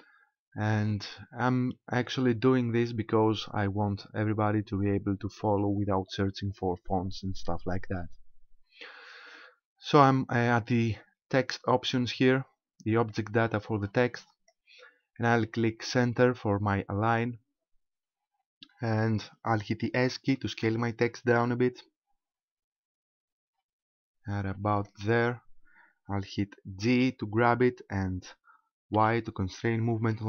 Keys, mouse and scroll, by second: 13.1 click, 17.1 click, 17.9-18.7 scroll up 5, 20.7 s, 24.9 ctrl+click, 27.0 c.